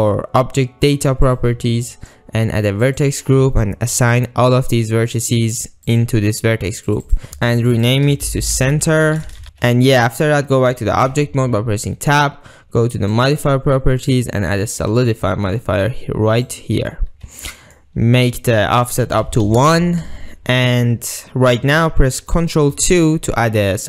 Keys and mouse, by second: 2.9 click, 6.0 click, 7.0 click, 7.3 ctrl+z, 7.7-9.4 drag, 9.4 Tab, 9.9 ctrl+click, 11.2 Tab, 13.2 click, 14.2-16.6 drag, 17.0-17.4 middle drag, 17.6 middle click, 19.1 click, 22.8 ctrl+2.